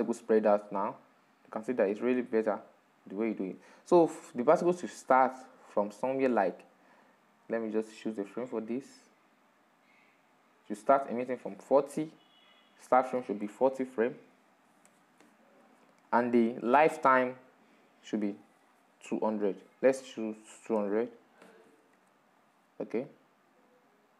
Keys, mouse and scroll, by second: 0.8 click, 1.0-2.9 middle drag, 2.9-10.6 drag, 16.0-22.3 drag.